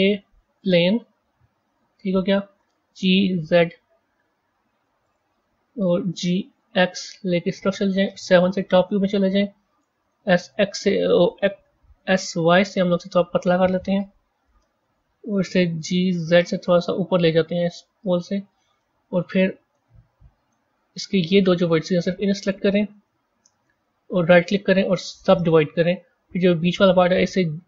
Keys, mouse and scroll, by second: 2.5 g, 5.8 g, 8.4 KP_7, 10.0 s, 11.9 s, 14.2 KP_1, 15.7 g, 19.6-21.2 middle drag, 21.2 click, 22.3 shift+click, 24.1-26.5 right drag, 26.5 click.